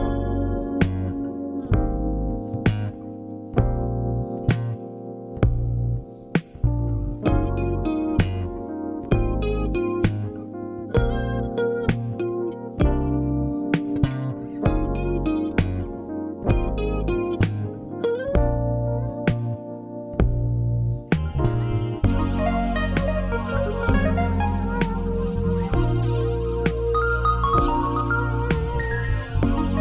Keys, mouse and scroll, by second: 0.0-1.1 drag, 1.9-3.1 drag, 5.6 click, 11.0-12.5 middle drag, 11.0-12.5 scroll up 2, 12.9 ctrl+r, 13.6 scroll down 1, 14.4 ctrl+r, 16.3 right click, 21.0 scroll down 1, 21.2-22.7 shift+middle drag, 22.9-26.6 middle drag, 24.0 scroll down 1, 25.4 scroll up 1, 26.6 z, 27.4 middle click, 27.6-29.8 middle drag, 27.8 scroll down 1, 28.9-29.7 scroll up 1.